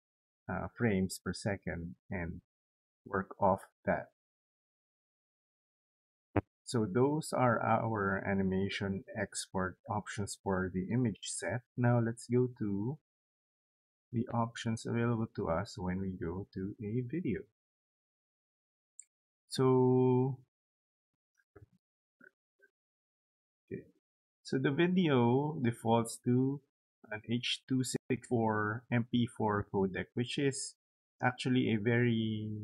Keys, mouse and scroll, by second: 10.4 click, 10.9 click, 11.8 click, 14.2 click, 17.0 click, 19.8 scroll down 2, 20.9 scroll up 2, 21.6 scroll up 2, 22.9 click, 30.8 click, 32.5-32.6 drag.